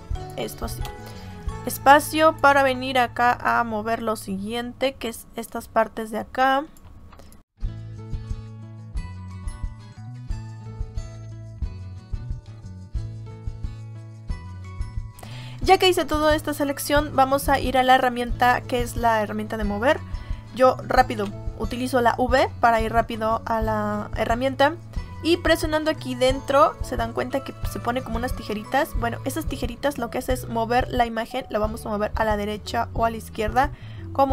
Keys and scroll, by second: 0.8 space, 21.0 v.